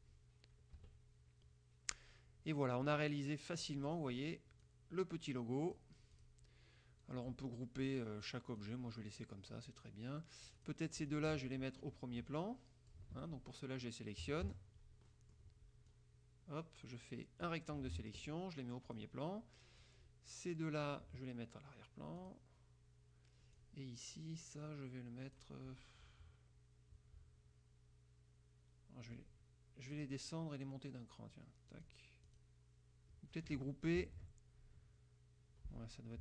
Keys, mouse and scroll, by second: 0.9 KP_Subtract, 2.9 click, 3.9 click, 4.7-6.1 drag, 6.3 click, 7.1-8.1 drag, 8.6 click, 10.7 click, 11.2 shift+click, 12.5 click, 13.2 ctrl+z, 14.3 KP_Subtract, 14.5 KP_Add, 15.2 click, 16.0-17.8 drag, 19.0 click, 20.0-21.2 drag, 22.3 click, 23.7-25.7 drag, 30.1 click, 31.9 click, 32.4 click, 34.1 ctrl+g.